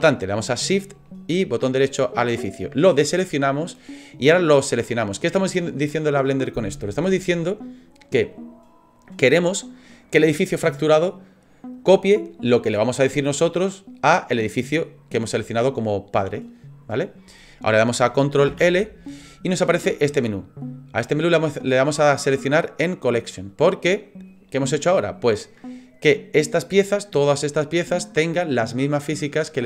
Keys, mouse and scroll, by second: 1.6 shift+right click, 18.5 ctrl+l.